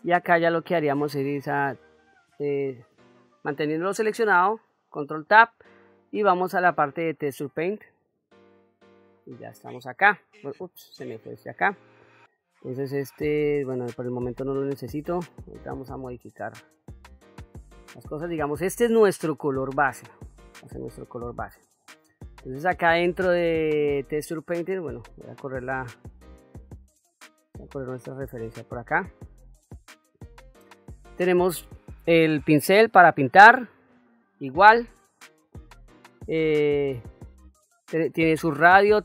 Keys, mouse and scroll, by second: 2.6 click, 3.1 click, 4.5 ctrl+Tab, 9.1 ctrl+click, 10.7 ctrl+z, 13.7 click, 15.5 middle click, 16.8 shift+middle click, 17.8-18.9 ctrl+middle drag, 19.8 ctrl+middle click, 20.9 middle click, 36.8 middle click.